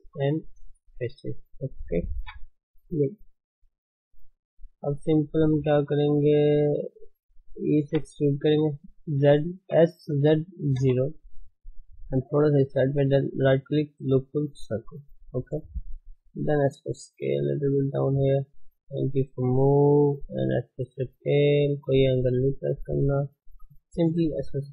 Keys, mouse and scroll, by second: 1.2 x, 2.9 KP_1, 4.0 shift+middle click, 4.3 middle click, 5.0 ctrl+space, 5.3 shift+middle click, 6.0 click, 6.3 click, 6.8 alt+shift+click, 7.8 e, 9.7 s, 12.0 g, 14.7-16.0 right drag, 16.0 s, 17.5 g, 19.3 s, 21.0 g, 24.3 KP_3.